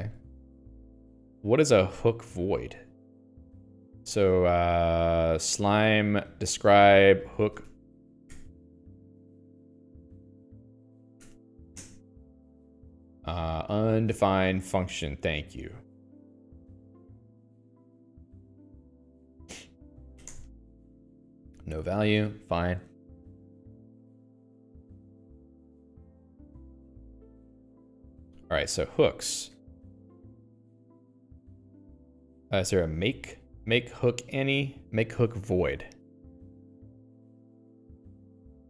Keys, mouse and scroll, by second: 0.1 click, 0.4 q, 0.8-3.0 scroll up 3, 3.0 middle click, 4.2 click, 4.6 alt+x, 6.9 ctrl+j, 7.1 Return, 7.5-8.6 typing, 9.8 Home, 9.9-11.0 typing, 11.5 End, 12.2 Return, 16.2 click, 18.7 Return, 20.6 2, 20.7 Return, 23.8 click, 24.1 q, 25.1 ctrl+d, 26.2-28.1 typing, 29.3 ctrl+j, 29.7-32.5 ctrl+j, 33.1-34.0 typing.